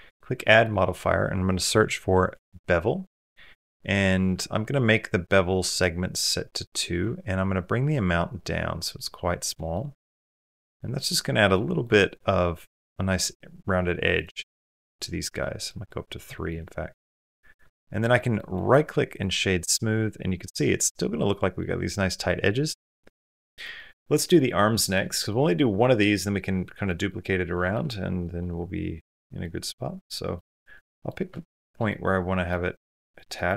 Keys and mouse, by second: 0.0-2.1 drag, 9.5 middle click, 10.6 middle click, 11.3 middle click, 11.8 shift+middle click, 14.3-15.0 middle drag, 15.2 middle drag, 15.7 middle drag, 16.1 shift+middle click, 16.4 middle click, 17.5-17.8 shift+middle drag, 18.0 middle click, 18.5 click, 19.5-20.6 middle drag, 21.4 middle click, 22.3 middle click, 22.8 middle click, 23.6 middle click, 23.8 middle click, 24.6 shift+middle drag, 24.9 middle click, 26.7 middle drag, 27.4 shift+middle click, 27.7-28.0 middle drag, 28.2-29.0 middle drag, 29.2 middle click, 29.9 middle click, 30.3 shift+middle click, 30.7 middle click, 31.7-32.3 middle drag, 33.2 shift+click.